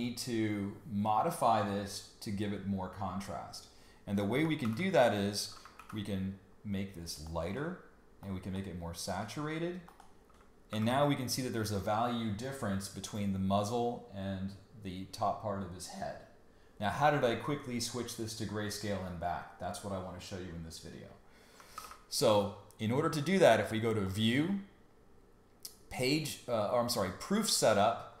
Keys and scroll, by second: 4.6 super+y, 5.7 super+u, 10.7 super+y, 21.7 super+y.